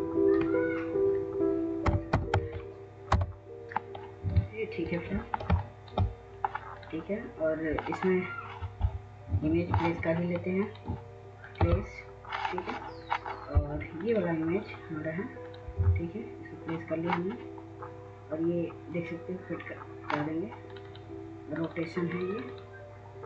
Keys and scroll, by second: 1.4-2.9 typing.